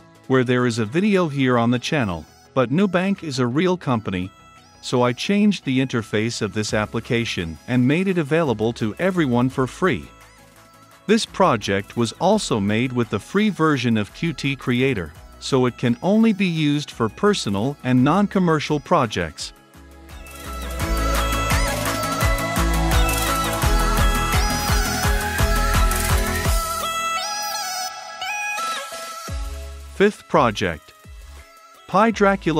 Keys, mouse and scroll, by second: 22.4-23.6 middle drag, 23.6-28.3 drag.